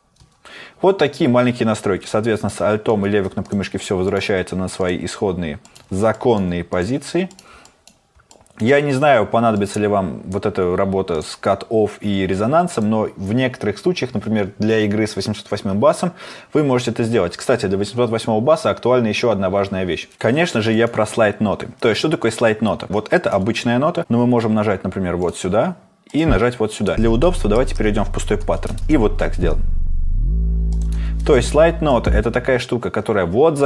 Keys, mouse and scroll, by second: 29.2 space.